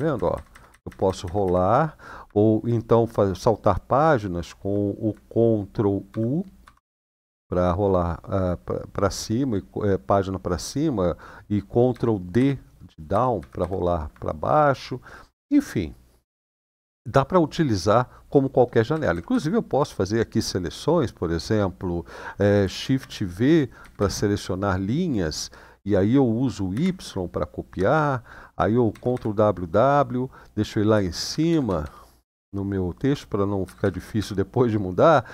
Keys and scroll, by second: 0.1 ctrl+y, 0.4 ctrl+y, 0.6 ctrl+y, 0.8 ctrl+y, 1.2 ctrl+y, 5.8 ctrl+u, 6.3 ctrl+u, 11.7 ctrl+d, 12.1 ctrl+d, 12.9 ctrl+d, 13.1 ctrl+d, 18.7 Up, 18.9 Up, 19.1 Up, 22.8 v, 23.5 Down, 23.7 Down, 26.5 y, 28.7 ctrl+w, 28.9 ctrl+w, 30.7 Page_Up, 30.9 Page_Up, 31.1 Page_Up, 31.3 Page_Up, 31.4-32.9 Page_Up, 33.4 Up, 33.6 Up, 33.9 Up, 35.1 p.